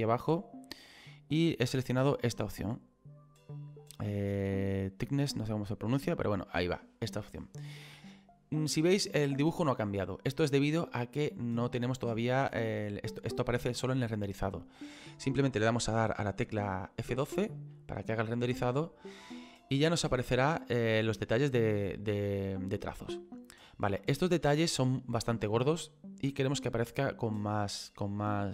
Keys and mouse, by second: 5.6 click, 17.4 F12.